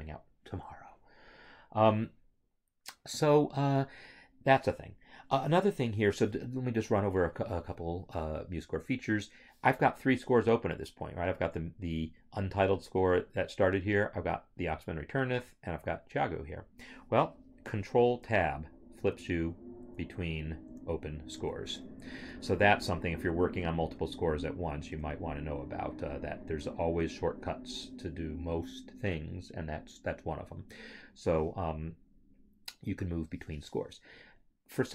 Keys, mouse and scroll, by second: 11.2 click, 15.8 click, 18.3 ctrl+Tab, 23.9 ctrl+Tab.